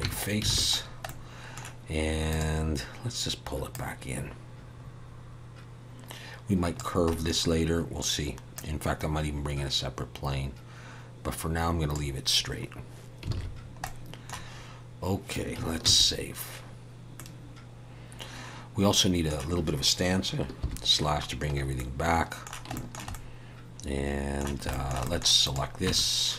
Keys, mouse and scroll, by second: 0.0 Tab, 0.5 alt+a, 0.8-1.6 scroll down 2, 1.1 middle click, 2.3 click, 7.1 scroll up 1, 8.5 click, 8.5-9.4 scroll up 2, 13.3 alt+a, 13.6-14.5 scroll down 2, 13.8 middle click, 14.5 scroll up 1, 15.5-16.7 scroll up 1, 16.7 ctrl+s, 17.1 middle click, 20.6 /, 21.1-21.8 scroll down 2, 21.8 middle click, 22.7 shift+middle click, 23.1 middle click, 24.7 shift+middle click, 25.0 middle click, 25.4 click, 25.8 Tab.